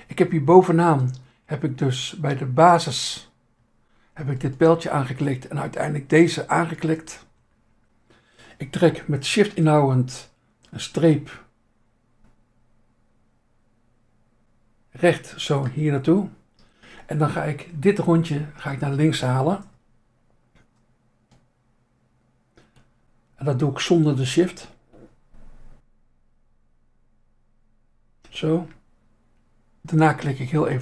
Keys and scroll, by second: 1.4 Insert, 7.4 Insert, 17.7 Insert, 18.6 Insert.